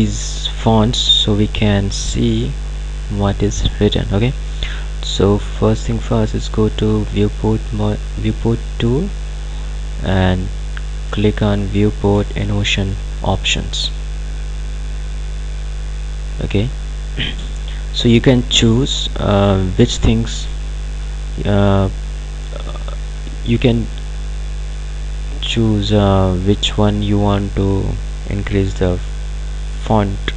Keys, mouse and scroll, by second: 7.2 click, 12.5 click, 25.1 click.